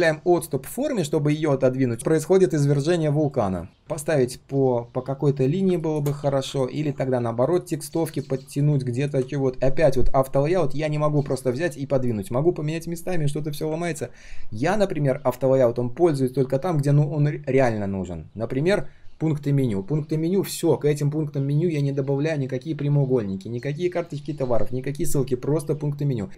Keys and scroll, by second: 13.8 ctrl+z.